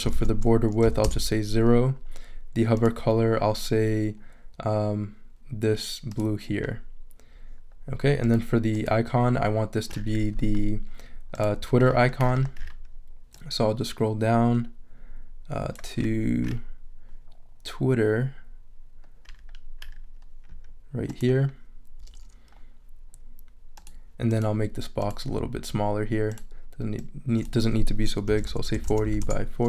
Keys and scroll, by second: 0.1 super+a, 0.8 super+0, 1.0 Return, 28.0-29.5 typing.